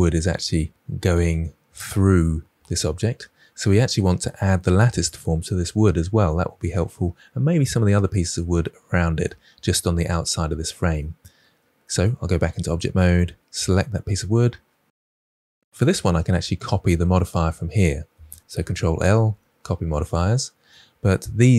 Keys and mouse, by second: 11.4 middle click, 12.4 Tab, 13.5 click, 18.7 ctrl+l, 20.7-21.5 middle drag.